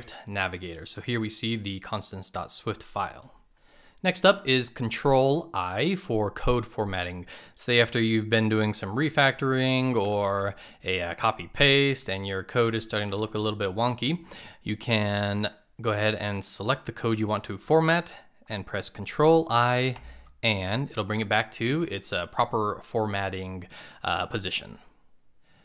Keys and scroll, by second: 4.2 ctrl+i.